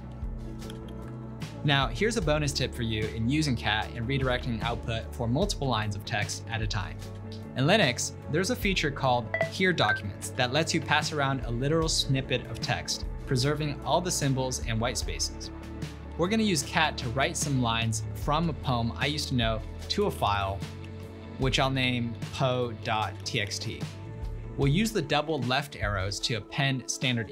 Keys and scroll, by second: 0.7 ctrl+l, 20.0-24.1 typing, 25.2 typing.